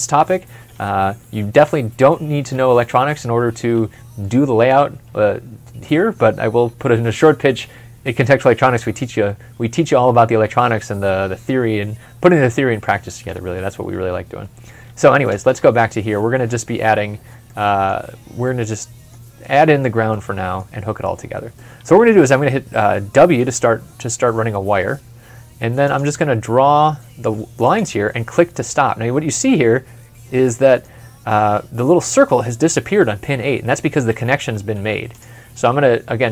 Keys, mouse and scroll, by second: 1.3 middle click, 1.3 ctrl+F12, 2.2 ctrl+F11, 15.1 ctrl+F12, 17.3 middle click, 23.2 w, 28.9 w, 28.9 scroll down 1, 29.5 scroll up 1, 30.3 middle click, 34.6 w.